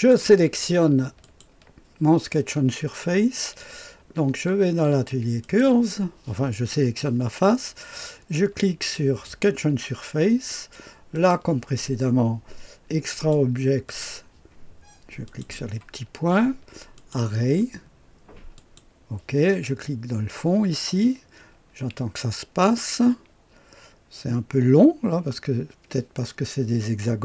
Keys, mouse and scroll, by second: 1.2 click, 5.3 click, 9.2 click, 11.0 click, 13.0-14.7 drag, 15.2 click, 16.9 click, 18.5-20.2 drag.